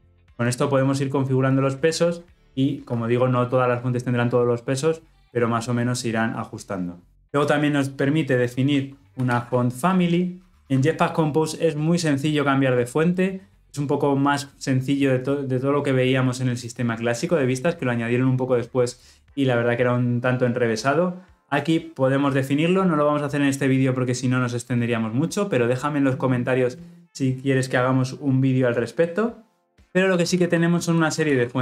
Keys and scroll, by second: 10.5 Return.